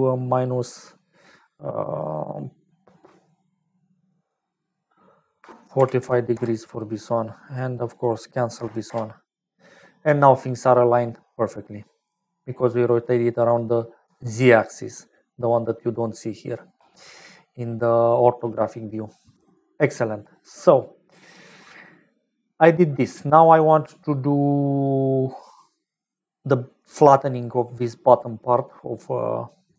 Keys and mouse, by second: 4.3-7.2 drag, 7.9-10.3 drag, 14.0-16.8 typing, 14.2 click, 16.0 click, 19.0 click, 25.5 click.